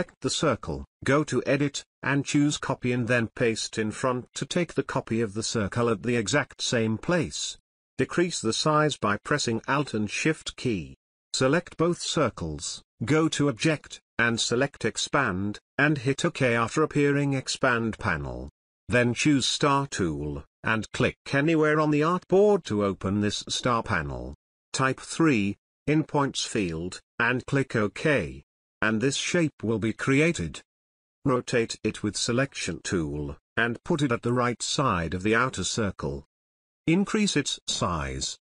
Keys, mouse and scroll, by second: 0.6-8.0 drag, 8.2 space, 8.4 ctrl+click, 9.0-9.6 drag, 23.2 3, 24.9 Return, 30.9-33.6 drag, 33.9-36.4 drag, 38.1-38.5 alt+shift+click.